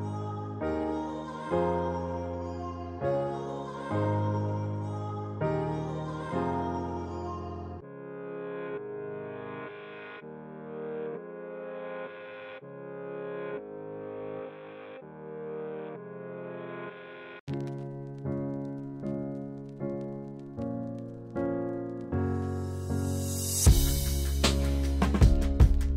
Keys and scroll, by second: 0.3 s, 7.9 s, 12.2 s, 16.0 s, 21.7 s.